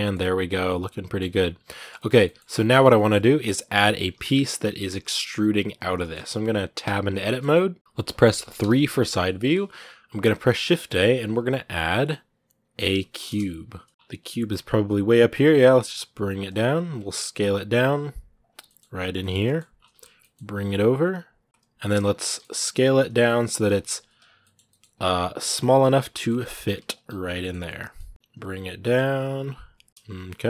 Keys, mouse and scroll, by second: 0.3 scroll down 2, 0.4 scroll up 1, 0.5 middle click, 1.0 scroll up 2, 1.2 r, 1.8 shift+middle click, 2.2-2.5 shift+scroll up 1, 2.5 shift+middle click, 2.7 scroll up 1, 4.1 KP_1, 4.8-5.8 scroll up 1, 5.8 shift+middle click, 6.6 Tab, 7.1-8.4 shift+middle drag, 8.4 KP_3, 9.1 a, 13.9 scroll down 10, 15.2 g, 16.4-16.8 scroll up 10, 16.9 s, 17.7 s, 19.0 middle click, 19.5 scroll down 2, 20.0 g, 21.3 scroll down 3, 21.4-21.9 scroll up 12, 21.6 middle click, 22.0 s, 24.2 middle click, 24.4 g, 25.9 middle click, 26.2 g, 27.8 middle click, 28.1 KP_3, 28.6 s, 29.9 shift+middle click, 29.9 scroll down 1, 30.1-30.4 middle drag.